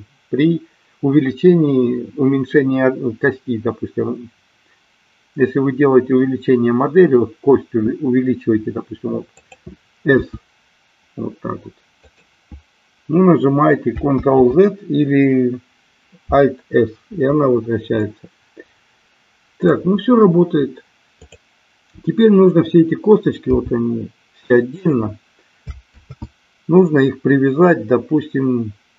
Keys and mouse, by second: 9.3 click, 10.1 s, 14.2 ctrl+z, 17.8-19.7 middle drag, 21.1 click, 23.3 g, 24.7 click, 26.0 ctrl+z.